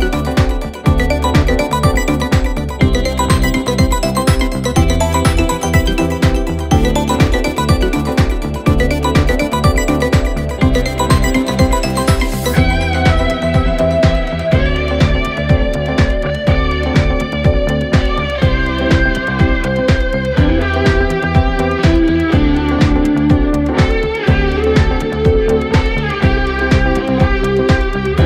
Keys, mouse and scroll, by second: 10.2 alt+scroll down 1, 10.9 space, 11.0-11.6 click, 11.4 space, 11.8-17.2 drag, 17.5 alt+scroll up 1, 19.2-28.2 drag.